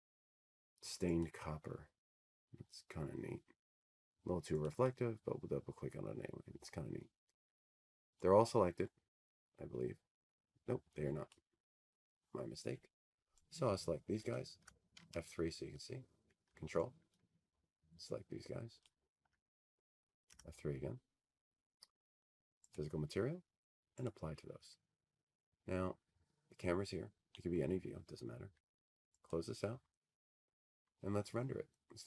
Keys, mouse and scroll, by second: 1.4-1.8 scroll, 2.6-4.2 scroll, 4.2-4.8 middle click, 6.8 click, 10.2 click, 10.4 click, 17.0-19.1 drag, 19.9-22.1 drag, 20.2 F3, 24.4 ctrl+click, 25.9 F3, 28.4 click, 29.6 click.